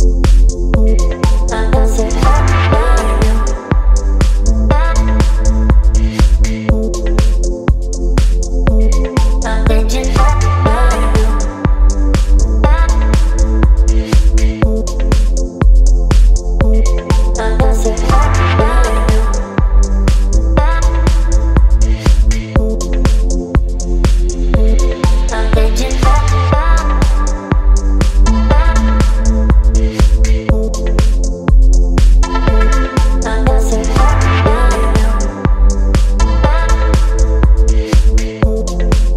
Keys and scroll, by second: 5.5 space, 9.2 b, 13.2 x, 23.3 space, 26.8 space, 33.0 v, 35.1 space.